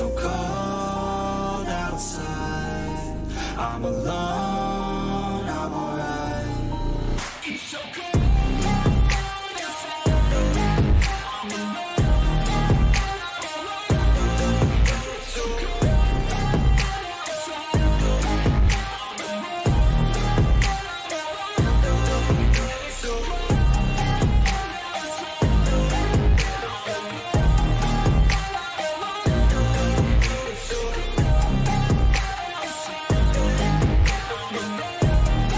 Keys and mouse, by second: 1.3 ctrl+v, 4.2-20.4 drag, 21.5 click, 24.6 click, 31.7 click, 32.1 ctrl+c, 34.1 click.